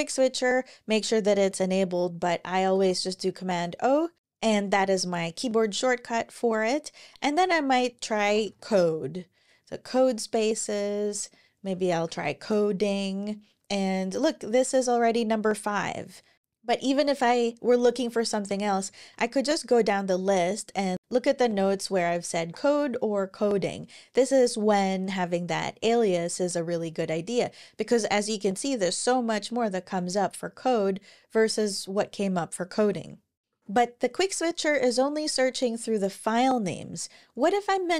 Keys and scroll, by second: 2.5 super+o, 6.9-8.7 typing, 11.5-12.4 typing, 17.6 Down, 17.7 Down, 17.9 Down, 18.0 Down, 18.2 Down, 18.6 Down, 19.4 Up, 19.8 Up, 21.1-22.1 typing, 23.2 Up, 25.6 Down, 26.5 Up, 27.4 Up, 27.6 Up, 27.8 Up, 28.0 Up, 28.3 Up, 28.5 Up, 28.7 Up, 28.9 Up, 29.1 Up, 29.3 Up, 31.1 Up, 33.4 Escape, 33.4 super+o.